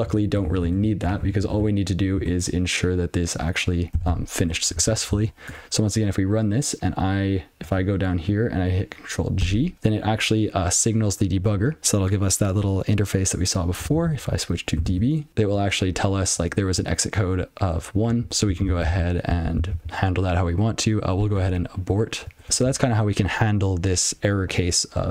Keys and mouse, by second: 4.0 ctrl+c, 4.9 super+l, 7.6 click, 14.5-15.3 typing, 16.3 click, 18.1 click, 19.3 ctrl+n, 21.3 a, 22.5 alt+p, 23.1 ctrl+a.